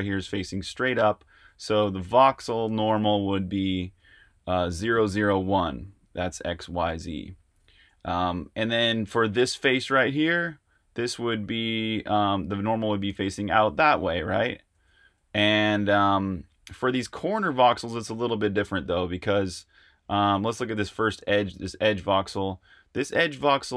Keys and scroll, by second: 1.4 t, 7.7 super+z, 15.2 super+z.